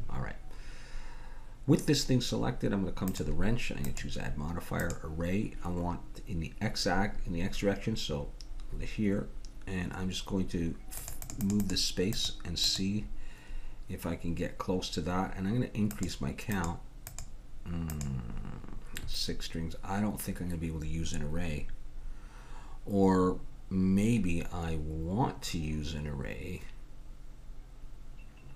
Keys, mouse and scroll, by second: 3.1-8.3 drag, 11.0-14.6 drag, 15.9-20.4 drag.